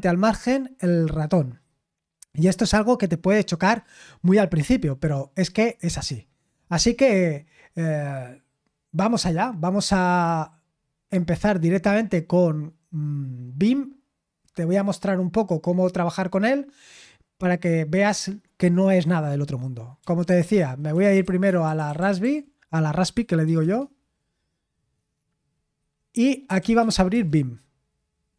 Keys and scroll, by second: 20.0-23.4 typing, 23.6 Return, 26.2-27.3 typing.